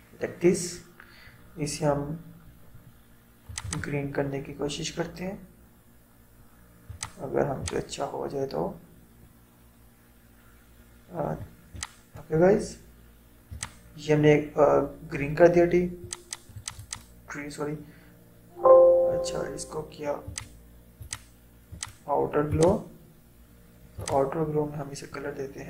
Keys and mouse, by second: 6.9-13.6 drag, 16.1 click, 20.3-25.6 drag.